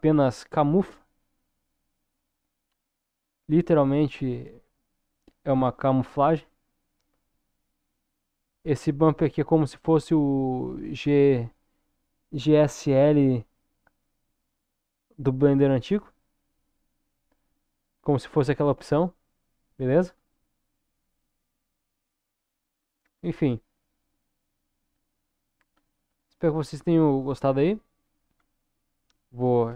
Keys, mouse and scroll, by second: 3.9-4.5 scroll down 1, 4.5-11.2 middle drag, 17.8-18.9 scroll up 1, 18.9 middle click, 20.1-20.7 scroll up 1, 20.7-25.9 middle drag, 26.6 middle click, 28.4 KP_0.